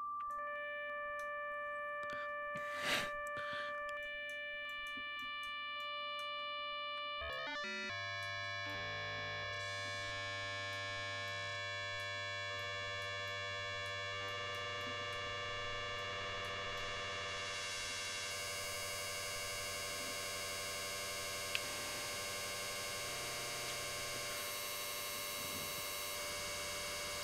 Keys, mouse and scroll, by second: 3.5 click, 4.2 click, 4.7 click, 5.3 click, 6.8 click, 8.2-10.4 drag, 10.8 click, 12.1 click, 12.8 click, 13.8 click, 14.3 click, 15.5 click, 16.3-17.8 drag, 17.8 click, 19.2-22.2 drag, 22.5-23.7 drag, 23.9 click, 24.6 click, 25.3-26.5 drag, 26.7-27.2 drag.